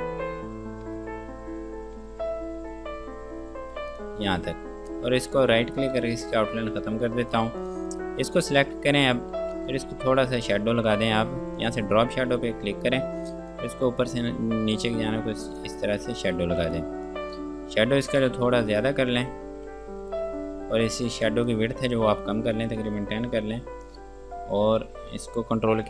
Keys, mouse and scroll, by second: 1.1 KP_0, 1.4 Tab, 2.2 KP_0, 2.4 KP_Enter, 4.1 click, 5.9 right click, 6.4 click, 9.6 g, 10.7 click, 16.7 F2, 17.0 click, 20.0 ctrl+space, 21.5 click, 22.6 KP_1, 22.8 KP_0, 23.0 KP_Enter.